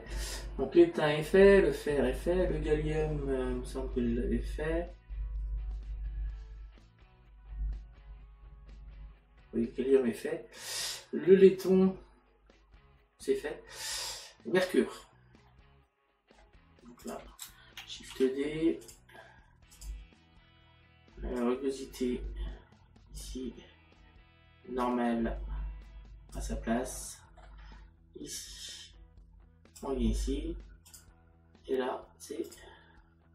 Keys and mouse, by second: 15.5 middle click, 17.4 click, 24.8 click, 26.9 middle click, 28.6 click, 30.9 click, 32.5 click.